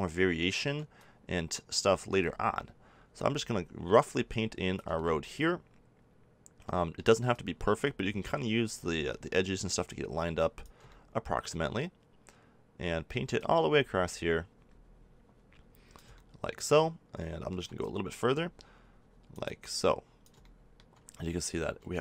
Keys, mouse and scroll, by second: 12.5 middle click, 13.3-16.1 drag, 16.1 middle click.